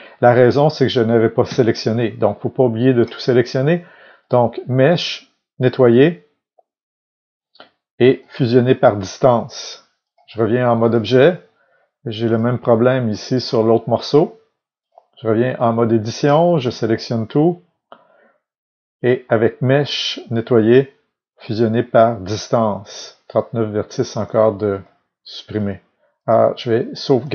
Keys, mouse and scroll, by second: 1.4 a, 14.8-23.2 drag, 16.6 a, 24.7-27.3 drag.